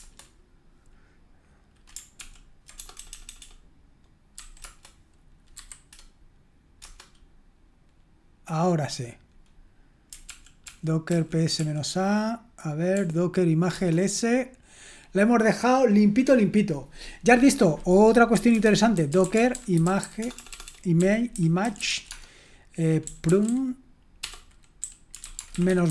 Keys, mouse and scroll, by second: 2.2 ctrl+p, 2.8-4.3 typing, 4.6 Return, 5.6 y, 6.8 Return, 10.3 ctrl+p, 10.7 ctrl+p, 11.1 ctrl+p, 11.6 ctrl+p, 12.9 ctrl+p, 13.7 Return, 18.1-25.9 typing.